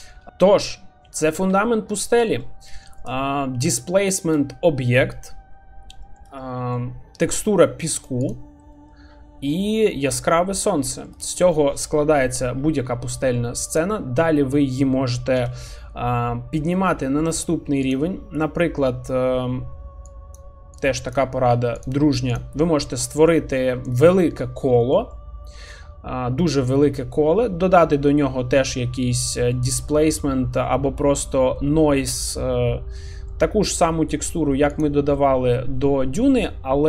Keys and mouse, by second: 0.2 middle click, 2.2 middle drag, 4.1 shift+middle drag, 6.1 shift+middle click, 6.5 middle click, 7.7 shift+middle drag, 9.9-10.2 middle drag, 11.1 shift+middle drag, 11.3 middle click, 13.2 middle drag, 15.4 n, 16.8 middle click, 20.8 click, 21.8 click, 23.3-23.6 middle drag, 24.8 shift+middle drag, 25.1-25.5 middle drag, 26.6-28.0 middle drag, 29.1 shift+middle drag, 29.5-30.6 middle drag, 33.0 shift+middle drag, 35.5 middle click, 36.2 shift+middle click.